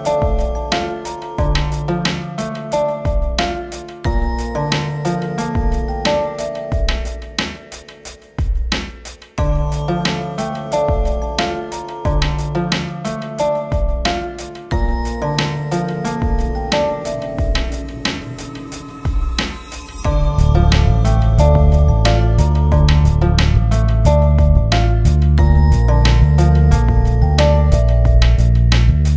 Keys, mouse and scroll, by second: 0.1 click, 0.4 F4, 0.5 click, 1.1 ctrl+z, 1.2 click, 2.1 click, 2.8 F4, 2.9 click, 6.7 shift+F2, 7.3 scroll down 1, 9.2 click, 10.2 click, 11.0 scroll down 1, 13.4-17.8 drag, 17.8 click, 19.2 shift+Page_Up, 21.9 click, 23.6 a, 24.3 click, 25.0 F4, 25.7 click, 27.6-28.3 typing, 28.5 scroll up 1.